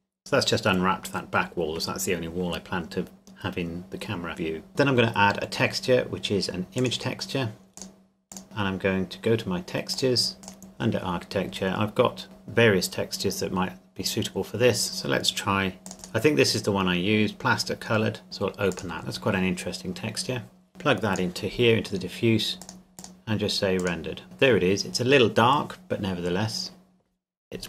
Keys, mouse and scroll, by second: 6.8 click, 9.9 click, 12.2 scroll down 1, 15.8 scroll down 1, 15.9 click, 17.2 click, 18.7 click.